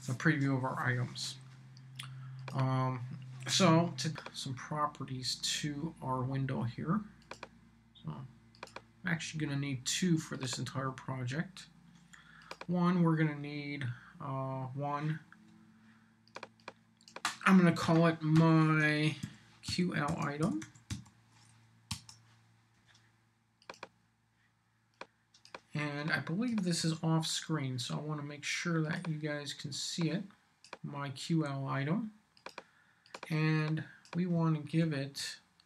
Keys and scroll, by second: 17.8-21.4 typing, 21.9 Return, 26.8 super+c, 34.8 super+v.